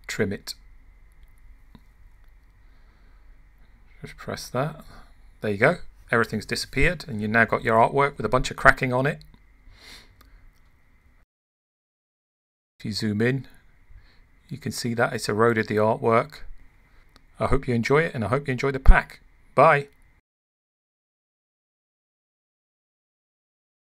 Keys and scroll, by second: 14.3 super+=, 18.3 super+-.